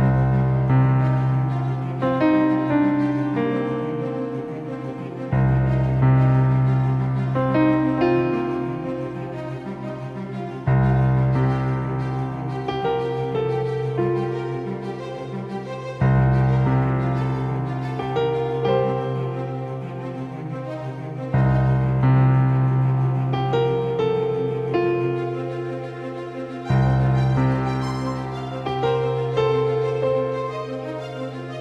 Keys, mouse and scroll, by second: 2.8-6.2 right drag, 3.8 shift+d, 9.6 r, 15.6-16.8 middle drag, 16.8 KP_0, 18.0-20.7 middle drag, 19.5-21.5 drag, 21.5-23.1 middle drag, 23.1 KP_5, 25.1 ctrl+z, 29.8 KP_0.